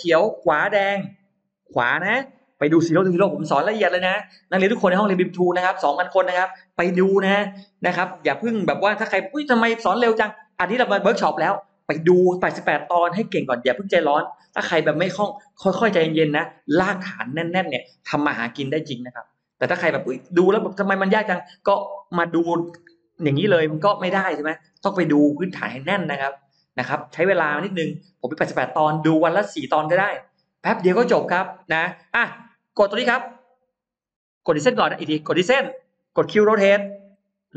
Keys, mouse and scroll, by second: 0.7 Right, 34.4 space, 34.6 click, 35.4 click, 36.9 q.